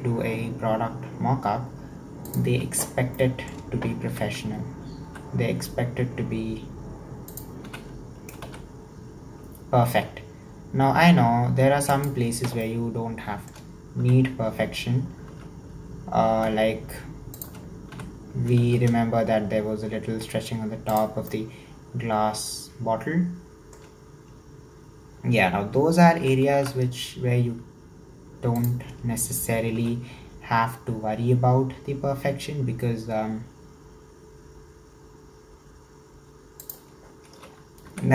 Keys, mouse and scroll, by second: 3.2 shift+middle click, 4.1 e, 7.7 s, 12.7-14.0 shift+middle drag, 14.0 e, 18.0 s, 21.3-24.3 shift+middle drag, 26.2 e, 29.8 s, 37.4 e.